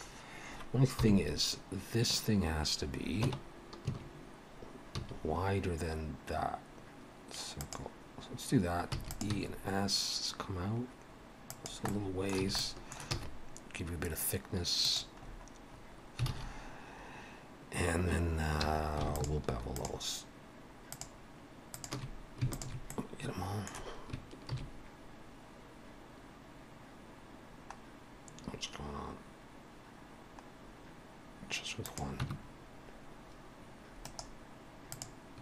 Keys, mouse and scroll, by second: 1.0 KP_7, 3.2 Tab, 3.9 a, 5.0 s, 9.3 e, 9.3 s, 11.9 middle click, 12.5 a, 12.6 middle click, 13.1 e, 15.2-16.1 scroll up 6, 16.3 alt+a, 18.6 2, 19.1 alt+shift+click, 22.9 middle click, 24.5 ctrl+b, 32.3 Tab, 33.9 right click.